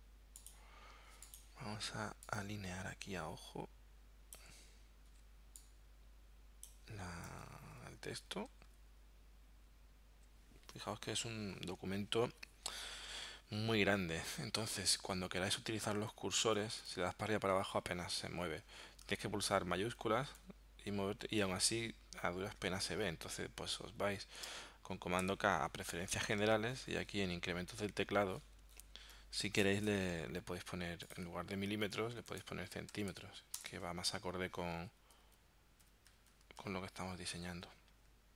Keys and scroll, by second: 7.6 Down, 8.8 shift+Down, 9.6 shift+Down, 15.9 Up, 16.6 Down, 17.4 Up, 17.8 Down, 20.4 shift+Down, 25.2 super+k, 32.2 BackSpace, 33.0 c, 33.1 m, 33.6 Return, 34.9 Up, 35.9 Down, 36.6 shift+Down, 37.4 shift+Up.